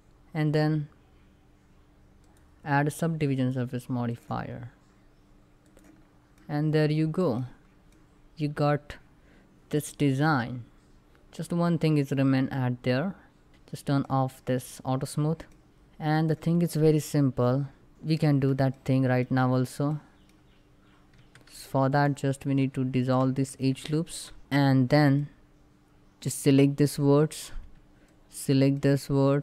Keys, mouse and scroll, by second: 1.9 click, 4.2-4.5 scroll down 1, 5.3 click, 5.7 scroll down 1, 6.0 middle click, 7.0 scroll up 1, 7.5-13.5 middle drag, 13.5 click, 15.7 middle click, 15.8 click, 17.9-18.9 middle drag, 18.9 shift+scroll up 2, 19.5 middle click, 20.0 scroll up 1, 20.8 2, 21.6 alt+click, 23.4 ctrl+x, 23.8 ctrl+middle click, 24.2 middle click, 24.7-25.4 scroll up 3, 24.8 middle click, 25.3 shift+middle click, 25.9-27.7 drag, 28.5 middle click.